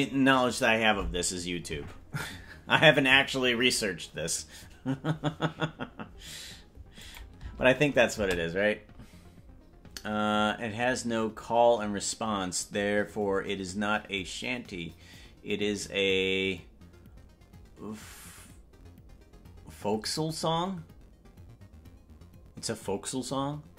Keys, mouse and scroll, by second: 7.2-23.7 drag, 7.5 space, 8.5 space.